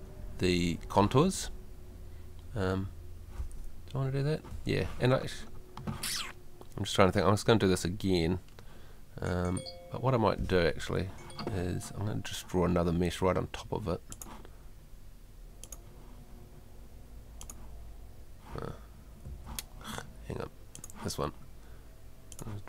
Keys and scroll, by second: 10.7 Home, 19.3 Escape.